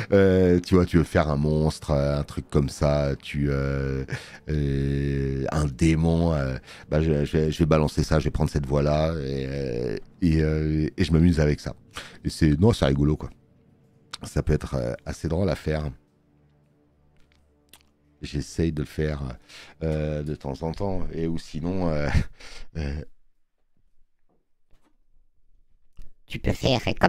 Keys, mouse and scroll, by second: 10.4 space, 10.5 click, 14.2 space, 14.8 click, 15.0 click, 15.2 click, 17.2 space, 17.4 click.